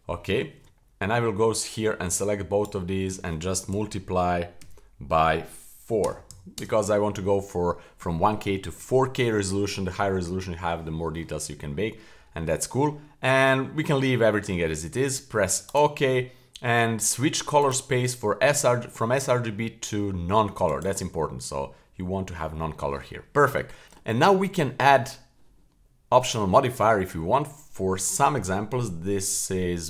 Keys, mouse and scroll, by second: 17.6-20.8 drag, 23.8 middle click, 23.8 scroll down 2, 24.4 middle click, 26.3 click.